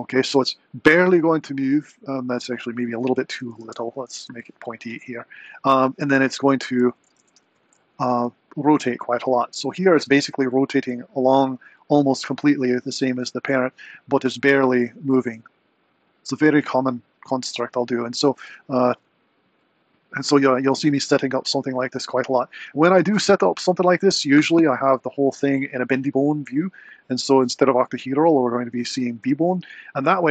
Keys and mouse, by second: 2.7-4.7 drag, 6.4 click, 7.2 alt+g, 7.3 alt+r, 8.2 r, 27.6-28.8 drag.